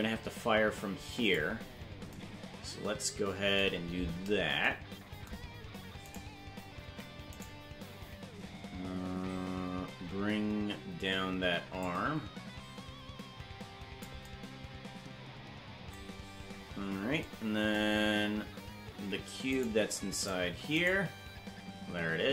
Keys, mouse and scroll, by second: 1.6-2.1 scroll down 3, 4.1-4.5 scroll down 3, 6.1 right click, 6.8 ctrl+Tab, 7.5 right click, 11.7-14.0 drag, 18.7 ctrl+Tab, 19.6 right click, 20.2 right click, 20.9 right click.